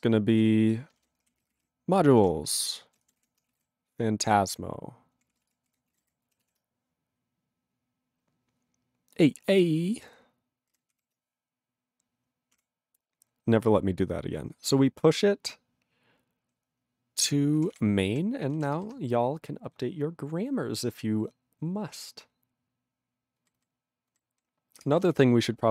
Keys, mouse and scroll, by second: 18.1 q, 24.8 ctrl+Return.